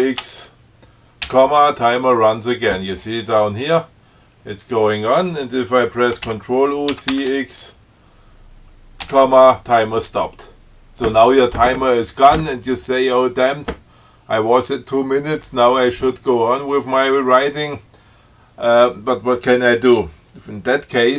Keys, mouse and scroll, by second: 0.1 ctrl+c, 0.2 ctrl+x, 1.6 ,, 6.6 ctrl+u, 7.2 ctrl+c, 7.4 ctrl+x, 9.3 ,.